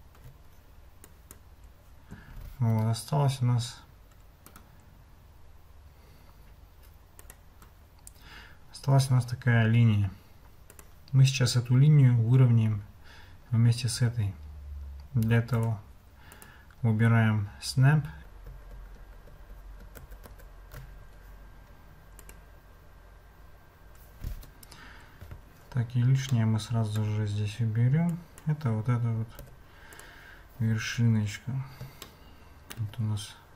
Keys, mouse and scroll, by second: 1.2 click, 2.7 Tab, 4.5-7.4 drag, 9.6 g, 15.6 click, 16.3-18.1 drag, 18.2 ctrl+z, 18.7 ctrl+z, 19.0 ctrl+z, 20.0 ctrl+shift+z, 20.3 ctrl+shift+z, 22.2 click, 24.3 Tab, 26.3 shift+click, 28.3-29.4 drag, 29.4 x, 30.8 Tab, 32.1-32.8 shift+drag.